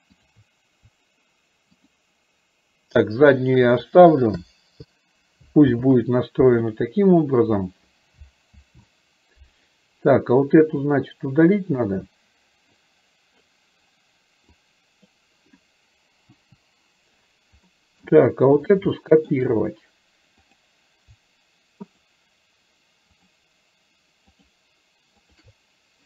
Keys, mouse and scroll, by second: 10.9-12.0 drag, 13.0 click, 14.6-15.2 drag, 17.7 middle drag, 19.0-19.5 shift+middle drag, 20.6 click, 22.0 shift+click, 24.5 shift+click, 25.4 shift+click.